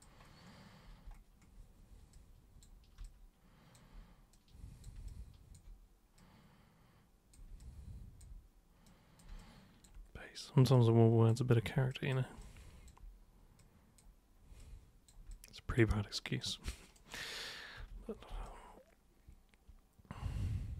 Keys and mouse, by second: 2.1 super+click, 3.0 alt+super+click, 4.3 super+click, 5.1-5.5 alt+super+drag, 6.2 super+click, 7.6 alt+super+click, 8.8 super+click, 9.4-9.8 alt+super+drag, 10.7 super+click, 11.9 alt+super+click, 12.4-12.9 alt+super+drag, 13.6 super+click, 14.6 super+click, 15.3 alt+super+click, 16.4 super+right click, 17.7 super+3, 18.4-20.7 alt+super+drag.